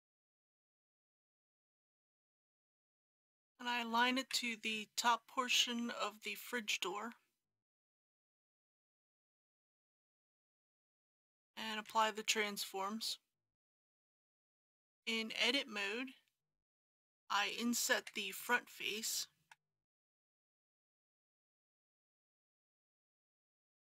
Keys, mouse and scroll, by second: 0.3 click, 0.8 KP_1, 1.7-3.0 scroll up 1, 4.1 g, 10.3 click, 11.8 ctrl+a, 13.4 click, 14.1 Tab, 17.9 3, 18.3 click, 19.5 i, 23.2 click.